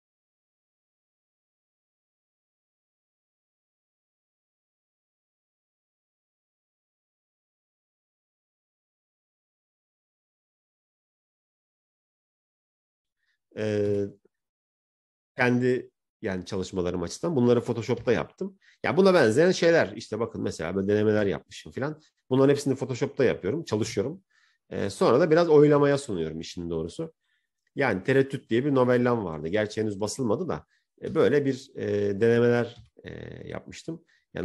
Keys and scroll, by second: 13.8 Right, 14.8 Right.